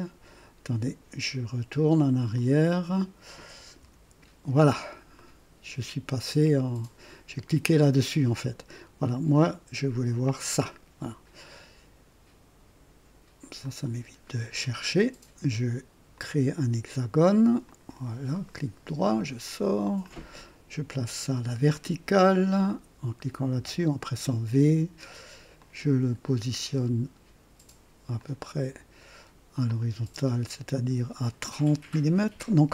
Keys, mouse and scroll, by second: 2.3 click, 3.7 &, 5.1-5.9 right drag, 13.6 click, 14.3-14.6 scroll up 2, 16.1 click, 17.6 click, 18.4 right click, 20.0 click, 23.5 v, 25.5 click, 29.6 click.